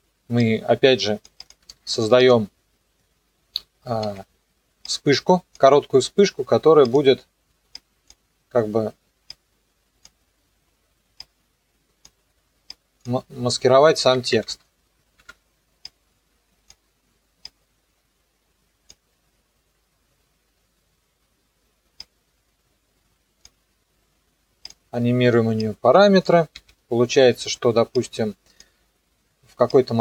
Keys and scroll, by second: 4.0 ctrl+d, 14.1 =, 15.2 Home, 26.5 u.